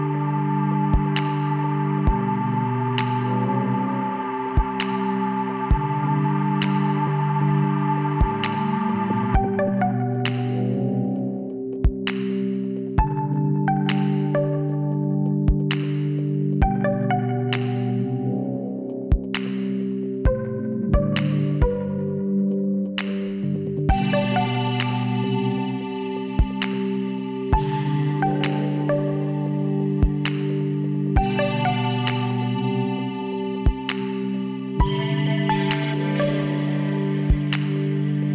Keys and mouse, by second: 0.2-3.0 middle drag, 3.0 z, 3.5-5.4 middle drag, 5.7-8.5 drag, 7.4 x, 9.6-12.0 drag, 12.0 middle click, 12.7 e, 16.9-18.4 drag, 18.4 middle click, 19.2 middle click, 20.7 KP_1, 21.1 middle click, 21.9 z, 25.1-27.0 drag, 26.8 e, 31.2 middle click, 31.9-35.4 drag, 32.5 b, 36.4-38.3 drag, 37.3 z.